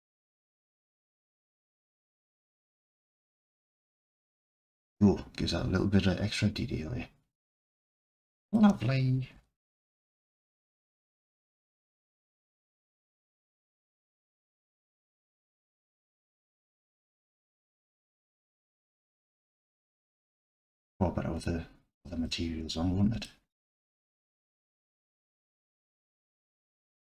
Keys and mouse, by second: 0.7 click, 1.1 Tab, 3.3 click, 4.2-8.6 alt+drag, 9.4 n, 9.6-10.1 drag, 11.5-11.9 drag, 14.1 alt+click, 15.5-15.9 drag, 15.9-16.4 middle drag, 16.7-17.6 alt+drag, 21.4-22.0 middle drag, 22.2 alt+click.